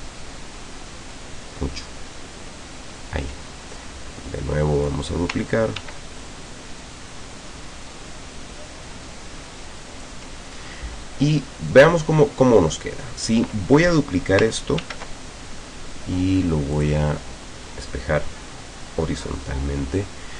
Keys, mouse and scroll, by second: 3.8-5.1 ctrl+drag, 5.8 ctrl+d, 6.3-10.3 ctrl+drag, 11.8-13.0 drag, 14.8 ctrl+d, 16.8 click.